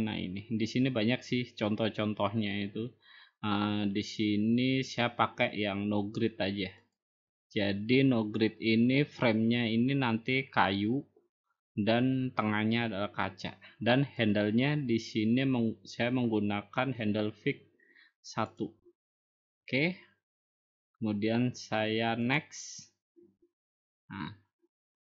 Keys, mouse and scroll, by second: 1.1 scroll down 3, 1.2 middle click, 1.7-2.5 scroll down 5, 2.5 middle click, 2.5-3.0 scroll down 6, 3.0 scroll up 1, 3.2 middle click, 3.2 scroll down 1, 3.6 middle click, 3.7-5.1 scroll, 7.8 click, 15.1 click, 19.4-20.5 drag, 23.2-24.3 drag.